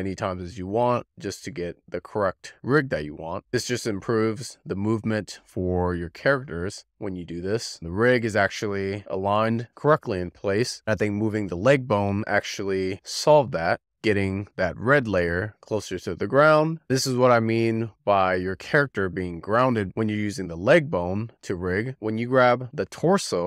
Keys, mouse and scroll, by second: 1.3-4.1 scroll down 30, 4.1-4.4 scroll down 1, 4.4-6.0 drag, 6.0-7.8 scroll down 2, 7.8-8.5 drag, 8.9-9.9 middle drag, 9.9 click, 10.4-16.9 middle drag, 16.9 click, 17.5 click, 17.8 ctrl+p, 18.6 click, 18.8-19.9 middle drag, 19.9-21.1 drag, 21.9-23.0 middle drag, 23.0 click.